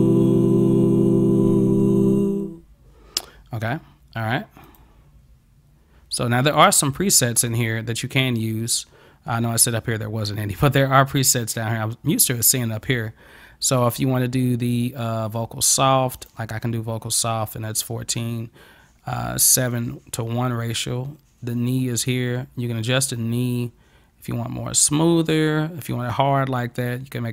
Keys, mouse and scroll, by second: 4.7 click, 6.5 click, 16.2 click, 22.1-27.3 drag.